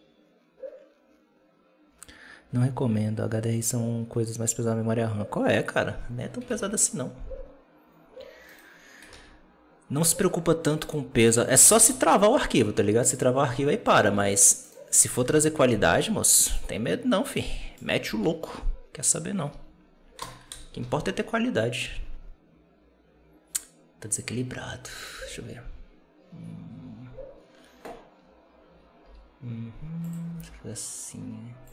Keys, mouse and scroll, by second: 6.4 alt+a, 8.4-9.0 right drag, 9.0 alt+a, 10.7 right click, 11.1 right click, 11.5 r, 14.1 alt+a, 14.6 right click, 15.1 KP_7, 16.4-17.2 right drag, 17.2-17.9 middle drag, 17.9 r, 20.4 KP_0, 20.7 alt+a, 24.9 right click, 25.0 g, 28.9 r, 30.2 g.